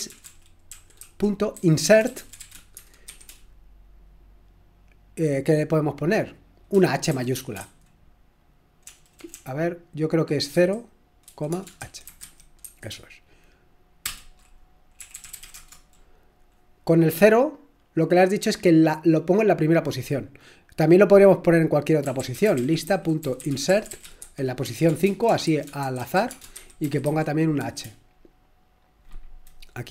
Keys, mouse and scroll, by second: 0.0-3.6 typing, 8.6-9.3 typing, 10.5-15.9 typing, 22.2-27.6 typing.